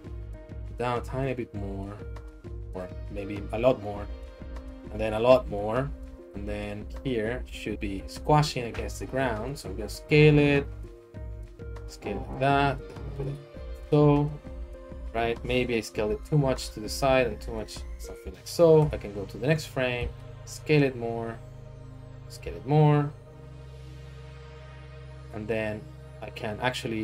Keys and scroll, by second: 0.5 Right, 3.8 Right, 5.9 Right, 8.7 s, 8.9 z, 10.3 s, 10.5 x, 15.9 s, 16.1 x, 17.0 s, 17.2 z, 18.8 Right, 20.0 s, 20.2 x, 22.2 s.